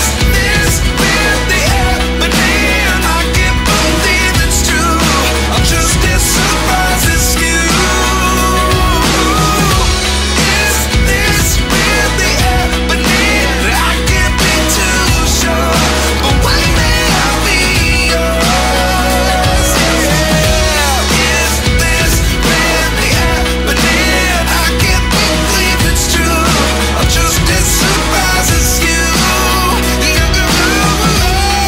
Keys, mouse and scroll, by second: 2.6-3.3 typing, 4.8-5.5 typing, 20.7 scroll up 1, 22.7-23.0 scroll up 1.